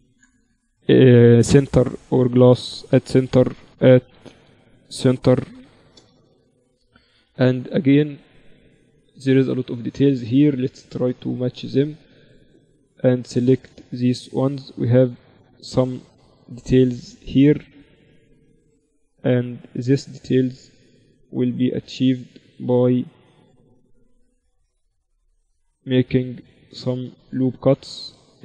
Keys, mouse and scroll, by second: 1.7 right click, 2.8 s, 7.2 KP_1, 8.2 z, 9.0-12.8 middle drag, 9.0 z, 11.0 z, 12.6 Tab, 13.2 Tab, 14.6 ctrl+z, 15.2 z, 16.5 ctrl+r, 19.1 ctrl+r, 20.7 ctrl+r, 22.6 ctrl+r, 24.9 z, 25.4 z, 26.6 ctrl+r, 27.8-28.4 typing.